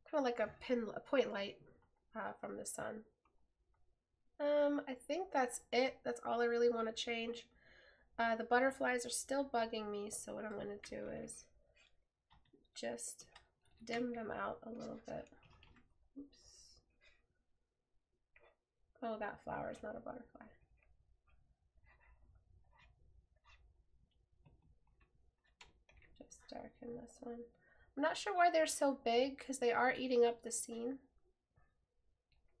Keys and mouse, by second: 12.4 right click.